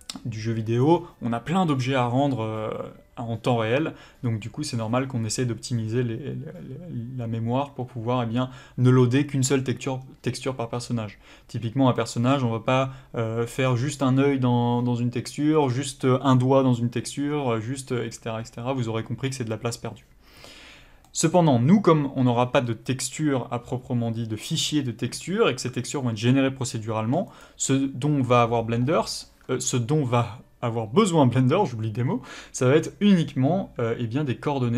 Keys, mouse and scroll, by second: 27.4 click.